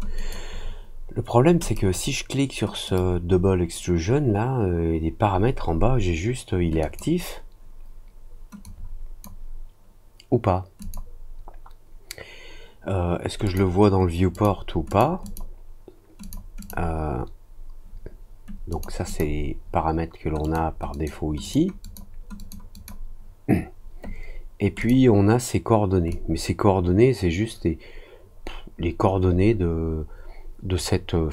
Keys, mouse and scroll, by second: 0.1 click, 1.6 click, 2.8 click, 6.7 click, 8.6 click, 10.7 click, 13.4 click, 14.3 click, 14.8 click, 15.2 click, 16.2 click, 16.5 click, 18.6 click, 19.0 click, 20.4 click, 20.9 click, 21.4 click, 21.8 click, 22.3 click, 22.7 click, 24.7 click, 26.0-31.3 drag.